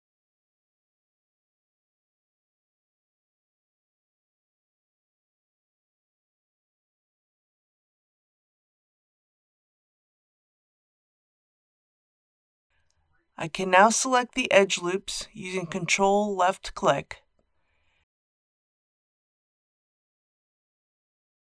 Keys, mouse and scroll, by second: 1.1 g, 1.4 z, 2.8 click, 11.4 2, 13.5 o, 16.5-17.6 middle drag, 19.6 click, 20.8 alt+click.